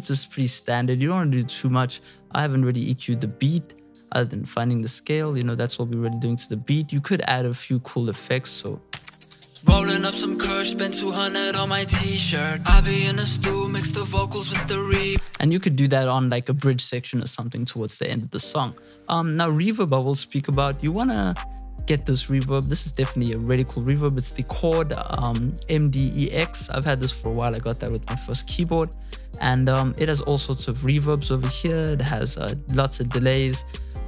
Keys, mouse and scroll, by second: 7.4 F1, 7.6 F1.